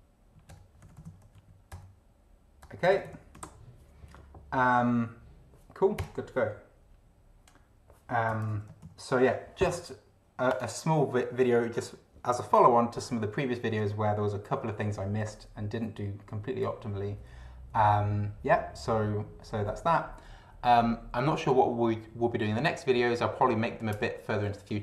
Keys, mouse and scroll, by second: 0.0-3.7 typing, 1.7 Return, 6.0 Return, 8.3 Return, 8.8 ctrl+d, 10.5 click.